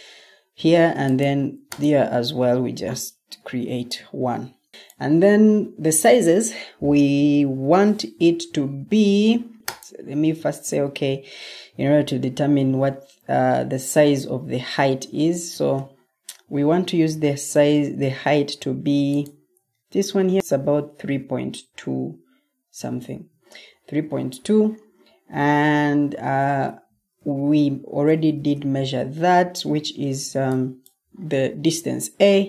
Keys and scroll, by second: 17.4 m, 23.0 Escape, 28.3 ctrl+t.